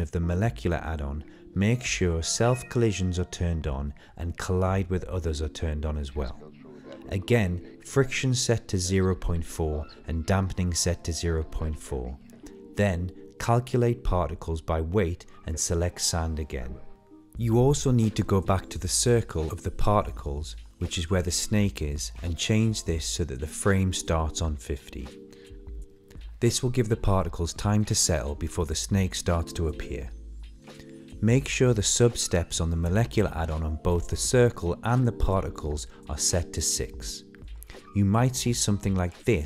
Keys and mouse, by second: 0.7-2.4 drag, 3.4-4.4 middle drag, 4.7 shift+middle drag, 7.9 click, 8.8 click, 11.5 click, 12.4 click, 13.0 click, 13.2 drag, 14.6 middle click, 14.9-15.5 middle drag, 15.8 middle click, 16.2 shift+middle click, 16.4 middle click, 16.6 shift+middle click, 17.2 click, 18.4 click, 18.7 click, 19.4 click, 21.7 click, 23.1 click, 29.0-30.2 drag, 31.3 click, 32.9 click, 34.7 click, 35.1-35.9 middle drag.